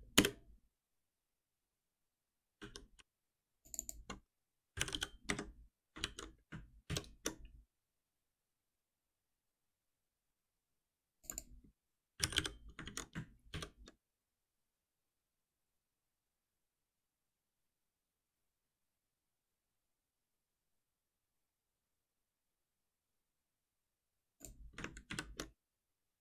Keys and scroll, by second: 2.5 alt+3, 5.3 Escape, 6.0 ctrl+s, 6.8 shift+F10, 12.8 ctrl+s, 13.5 shift+F10, 25.1 ctrl+shift+Up.